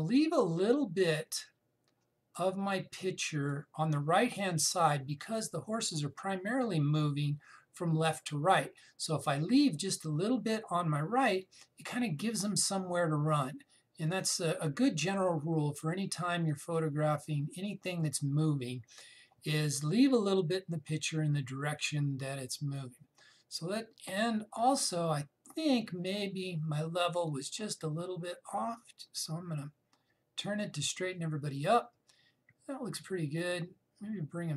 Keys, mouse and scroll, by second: 12.1-21.0 drag, 21.1-26.8 drag, 27.9-34.5 drag.